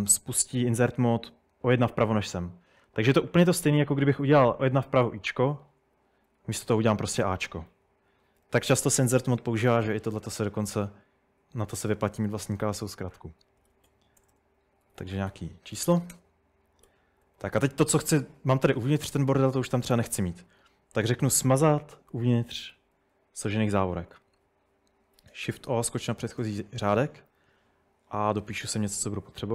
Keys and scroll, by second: 2.3 Escape, 4.7-5.1 typing, 5.9 Escape, 6.6 a, 8.1 Escape, 8.3-9.0 typing, 10.2 a, 13.5-17.5 typing, 21.6-22.7 typing, 25.2 typing.